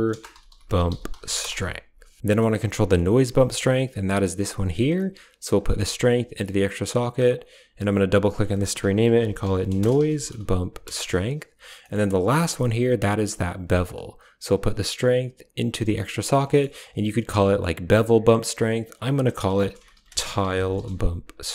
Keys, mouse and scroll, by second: 2.2 middle click, 2.7 middle click, 3.4-4.8 drag, 5.4-6.5 drag, 7.0-10.9 drag, 11.6 middle click, 12.2-13.7 drag, 14.3 click, 14.5-16.0 drag, 16.4 middle click, 16.4 click, 17.7-18.8 drag, 21.3 BackSpace.